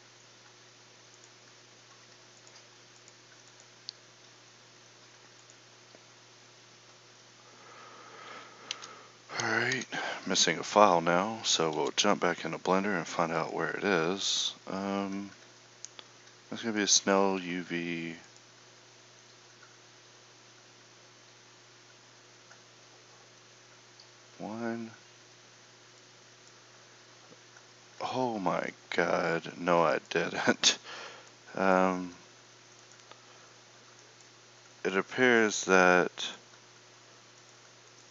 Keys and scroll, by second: 11.7 ctrl+Up.